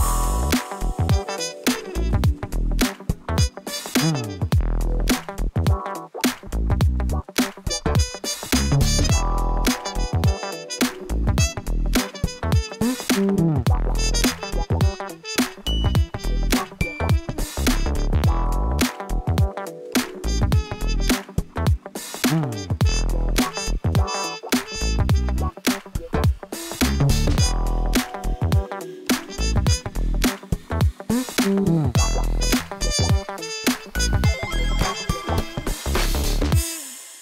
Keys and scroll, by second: 0.0 shift+z, 1.2 shift+z, 1.6 g, 2.5 Tab, 3.5 Tab, 4.2 g, 5.3 g, 6.8 Tab, 7.1 Tab, 9.5 Return, 10.8 shift+r, 12.4 shift+z, 14.6 shift+z, 15.4 g, 15.4 shift+z, 16.0 g, 18.4 g, 20.0 Tab, 20.7 Tab, 21.8 g, 24.7 g, 25.2 Tab, 29.2 Return, 30.5 shift+r, 31.0 Tab, 31.4 Tab, 32.5 alt+a, 32.7 c, 33.7 Return, 34.7 shift+r, 35.3 Tab.